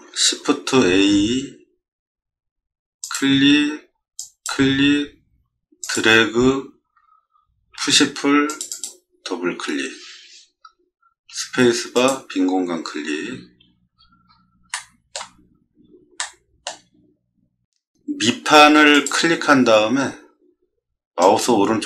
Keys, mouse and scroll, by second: 0.7 shift+a, 3.0 click, 4.2 click, 5.8 click, 7.8 p, 8.5 click, 8.7 click, 11.3 space, 11.9 click, 13.1 middle click, 13.9-14.3 scroll down 6, 14.7-15.1 shift+middle drag, 15.5 middle click, 16.2-16.6 shift+middle drag, 18.9 click, 21.2 right click.